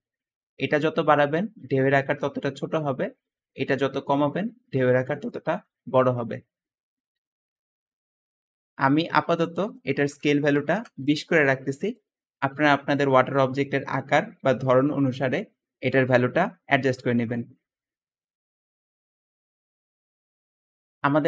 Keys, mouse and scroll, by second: 10.3-10.8 typing, 10.9 Return, 11.1 Return, 21.1 `.